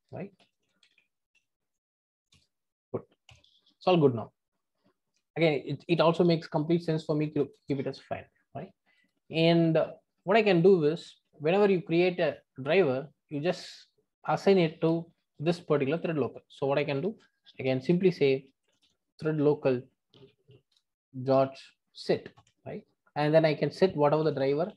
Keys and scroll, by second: 2.3 Return, 20.7 Return.